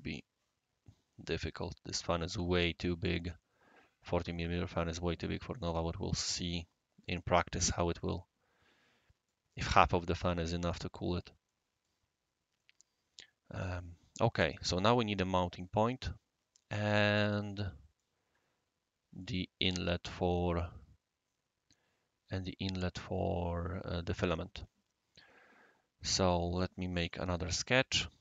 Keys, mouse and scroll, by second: 3.0-4.1 right drag, 4.8-7.3 right drag, 8.1-9.3 right drag, 10.5-11.2 right drag, 11.5-11.9 middle drag, 12.1 scroll down 1, 12.3-12.6 scroll up 1, 12.6-14.1 right drag, 17.6-18.6 scroll up 1, 17.9-19.2 right drag, 19.4 scroll up 1, 19.4 scroll down 1, 21.2 scroll up 1, 21.5-21.9 scroll down 3, 27.0 shift+s, 27.6 click.